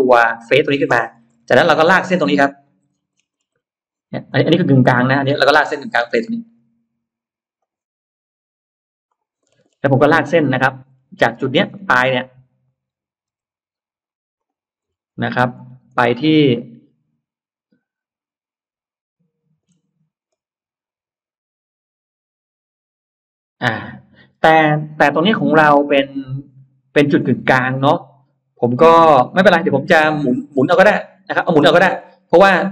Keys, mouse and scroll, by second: 0.9 middle click, 1.4 middle click, 2.7-3.5 scroll down 4, 3.9-5.6 scroll up 6, 4.5 middle click, 6.3 l, 7.5 click, 8.9 click, 9.3-10.0 scroll down 3, 9.5 space, 10.0-10.4 scroll up 1, 10.1 middle click, 10.7-11.1 scroll down 1, 11.3-11.9 scroll up 2, 12.0 middle click, 12.7 middle click, 13.3 l, 14.2 click, 14.7-16.1 scroll up 2, 16.4-19.5 middle drag, 20.1-20.4 scroll up 1, 31.1-31.5 scroll down 1, 31.5 space, 31.8-32.1 scroll up 1.